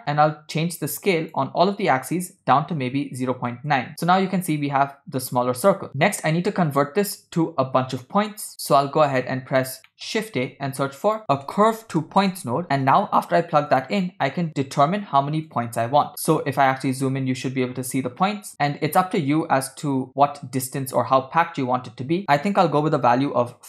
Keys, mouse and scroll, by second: 1.0-3.5 shift+drag, 6.2 middle click, 8.6 click, 9.1 click, 9.9 middle click, 10.4 shift+a, 14.3 scroll up 1, 14.5-15.0 scroll down 1, 15.5 shift+click, 16.3 scroll up 3, 16.9 shift+middle click, 17.1 scroll up 1, 17.2-17.6 scroll down 1, 17.7-18.1 scroll up 2, 18.4 shift+middle click, 18.6-19.6 scroll down 1, 20.1-23.6 shift+drag.